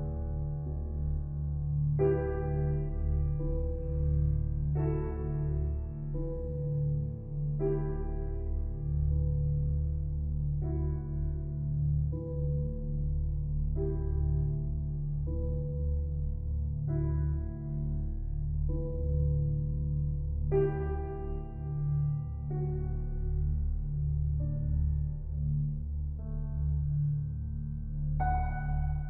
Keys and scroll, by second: 3.6 ctrl+t.